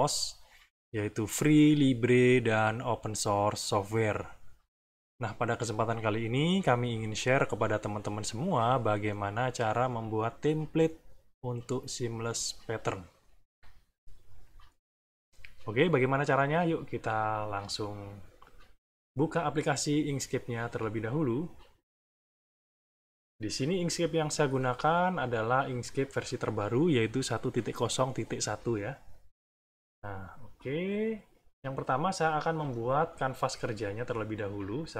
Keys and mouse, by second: 23.4 click, 24.7 click, 29.1 click, 30.0-31.4 middle drag, 32.5 click.